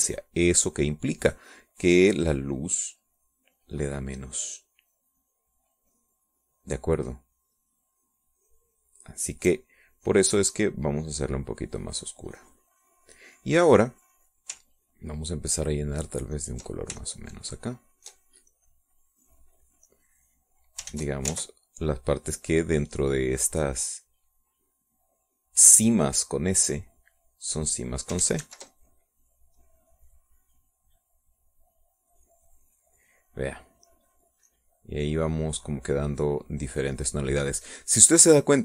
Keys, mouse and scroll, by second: 12.0-13.9 drag, 14.1-15.3 middle drag, 17.5 ctrl+click, 18.2-19.4 ctrl+shift+drag, 19.7-21.0 shift+drag, 21.0 click, 22.1 ctrl+z, 22.7 ctrl+click, 23.8-25.0 ctrl+drag, 25.2-27.8 drag, 28.3 click, 29.4 ctrl+z, 30.7 click, 32.1-33.1 drag, 33.1-34.2 drag, 34.7 middle click, 35.6 click, 36.6-38.5 drag, 38.5 middle click.